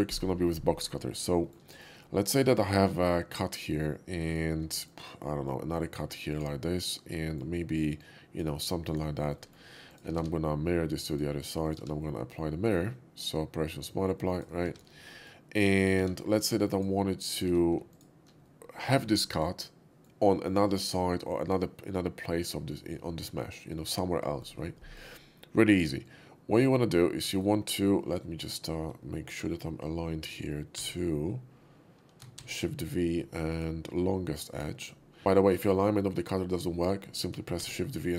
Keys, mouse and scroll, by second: 1.0 shift+middle click, 1.4 middle click, 1.7 middle click, 2.7-3.5 drag, 4.3 shift+click, 4.7 middle click, 5.3-5.9 drag, 6.3 click, 7.1 shift+middle drag, 7.9-8.4 drag, 8.9 click, 9.3 middle drag, 9.9 click, 10.1 alt+x, 11.1 click, 11.6 click, 11.8 q, 14.2 click, 15.1 middle click, 16.0 q, 16.5 q, 16.6 click, 17.3 click, 17.8 alt+q, 17.9 click, 18.4-20.0 middle drag, 23.7-24.3 middle drag, 24.7 middle click, 26.0-27.3 drag, 27.4-29.0 right drag, 30.8 shift+v, 32.3 shift+v, 33.5 click, 34.4 click.